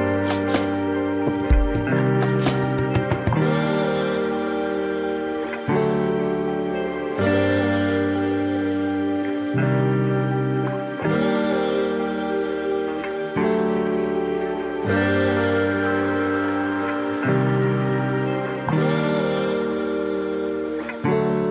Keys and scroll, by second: 5.9 ctrl+=, 6.2 ctrl+-, 9.3 ctrl+alt+z.